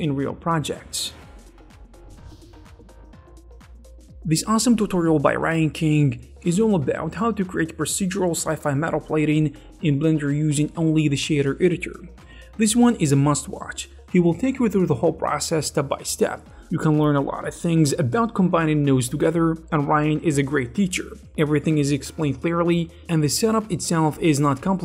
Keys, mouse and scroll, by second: 1.8 middle click, 2.4-5.4 scroll down 2, 5.4-10.2 drag, 13.2 shift+a, 13.4 click, 13.8 ctrl+j, 13.9 middle click, 14.0 click, 14.3 scroll up 2, 14.5 scroll down 4, 14.7 click, 14.9 shift+a, 15.1 click, 15.3 middle click, 15.3 scroll down 1, 15.4 scroll up 5, 15.5 middle click, 15.5-16.0 scroll down 5, 15.7 click, 16.0 middle click, 16.1 middle click, 16.1 click, 16.2 click, 16.4 click, 16.5 middle click, 16.6 scroll up 1, 16.8 click, 17.4 middle click, 17.8 ctrl+shift+click, 18.1 shift+middle click, 18.3 click, 18.5 scroll up 4, 18.9 a, 18.9 middle click, 19.1 click, 19.3 middle click, 19.5 middle click, 19.6 scroll down 1, 19.7 shift+a, 20.1 middle click, 20.3 click, 20.4 KP_0, 20.7 click, 21.0 click, 21.2 click, 21.4 middle click, 21.5 click, 21.7 scroll down 4, 22.1 click, 22.4 click, 22.6 middle click, 22.7 click, 22.9 click, 23.2 click, 24.0 right click, 24.1 click, 24.1 x, 24.4 click, 24.6 click, 24.7 scroll up 2.